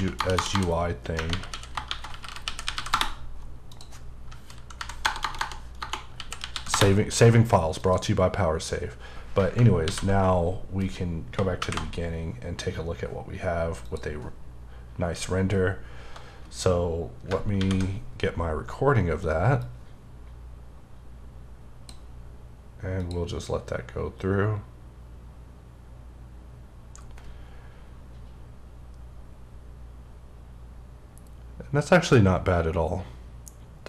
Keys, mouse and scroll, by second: 1.3 typing, 2.9 Return, 3.7 click, 4.7 ↘, 6.7 Return, 7.8 click, 9.8 ctrl+s, 13.8 click, 17.6 F2, 21.9 click, 25.5 click.